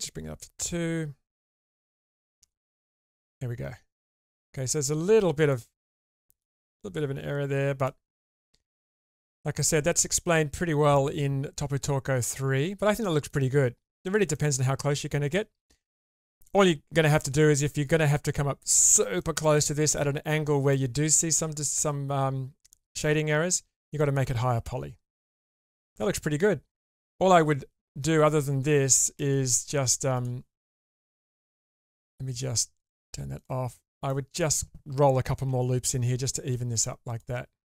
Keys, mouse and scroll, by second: 2.3 Tab, 3.2-4.8 middle drag, 5.5 middle click, 7.8-13.3 middle drag, 14.3-15.3 middle drag, 19.2 shift+middle drag, 19.6-20.7 middle drag, 24.0-25.5 middle drag, 25.9 shift+space, 29.2 shift+space, 30.1 click, 31.3 shift+space, 32.7 click, 33.4 click, 33.6 Tab, 34.1 middle click, 35.5 ctrl+r.